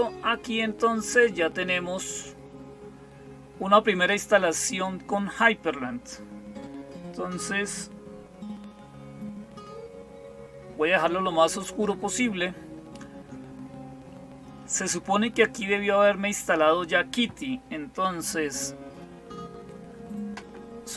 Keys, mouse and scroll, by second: 1.8 click.